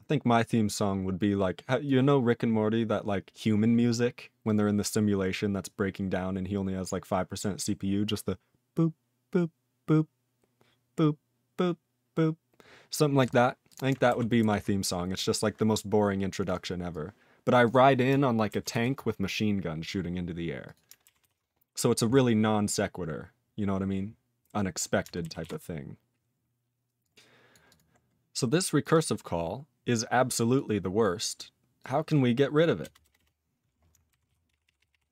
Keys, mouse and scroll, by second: 1.3 click, 1.8 click, 4.4 click, 4.5 click, 5.4 scroll down 1, 13.2 click, 13.2 double click, 13.6 click, 13.7 click, 14.4 ctrl+s, 14.8-15.1 scroll down 1, 15.1 click, 16.4 click, 16.4 click, 16.5 click, 16.9 click, 17.5 click, 17.6 click, 17.7 click, 18.7 ctrl+s, 20.2 scroll down 2, 20.6 click, 20.7 click, 21.2 ctrl+s, 23.6-24.7 scroll down 5, 24.7 scroll up 6, 25.4 ctrl+s, 25.7 scroll down 2, 27.0 click, 27.5 click, 27.6 click, 27.7 click, 27.9 scroll down 4, 28.8 click, 28.8 click, 28.9 double click, 28.9 double click, 29.9 click, 30.5 click, 32.6 click, 32.8 BackSpace, 33.0 BackSpace, 33.1 BackSpace, 34.3 ctrl+s, 34.5 ctrl+p, 34.7 ctrl+p, 34.8 ctrl+p, 34.9 ctrl+p.